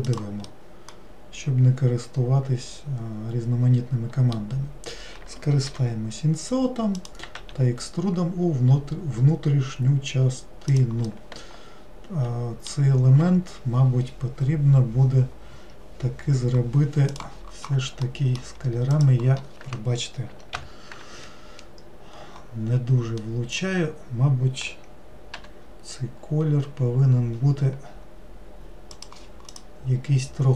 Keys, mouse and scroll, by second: 0.5-3.5 middle drag, 11.1-14.2 middle drag, 18.1 middle click, 18.9 click, 20.6 ctrl+l, 23.2-25.4 middle drag, 25.4 g, 29.5 click.